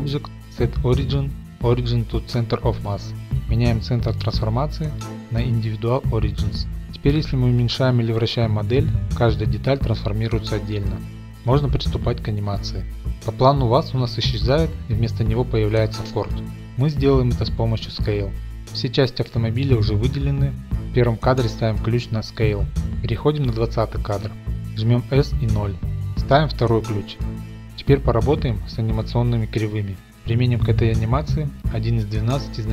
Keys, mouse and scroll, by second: 0.5 click, 2.9 click, 5.0 click, 6.0 click, 8.4 middle click, 11.5 click, 13.1 ctrl+z, 17.7 right click, 21.8 click, 24.2 click, 25.2 s, 25.2 0, 25.8 click, 26.3 i, 27.1 click, 28.3-29.8 drag, 29.9 click, 29.9 typing.